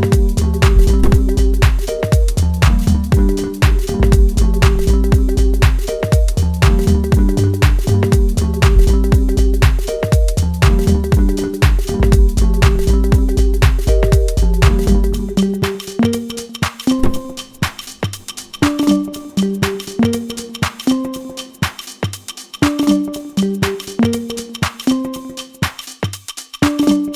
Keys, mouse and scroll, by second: 0.0 click, 2.6 middle click, 3.9 click, 4.7 click, 6.4 click, 7.7 click, 8.5 ctrl+z, 9.8 shift+f, 10.8 click, 11.5-12.0 scroll down 2, 11.6 middle click, 12.1 ctrl+z, 13.2 scroll down 1, 13.4 middle click, 14.6 middle click, 15.0-15.5 scroll up 1, 15.5 click, 15.7 click, 16.2 click, 16.6 click, 16.9 click, 17.7 click, 18.5-19.1 scroll up 4, 19.1 click, 19.7 ctrl+z, 20.4 scroll down 2, 20.8-21.1 scroll up 2, 21.1 middle click, 21.5 scroll down 1, 21.7 shift+middle click, 22.0-22.6 scroll up 3, 22.6 click, 25.4 shift+f, 26.4 click.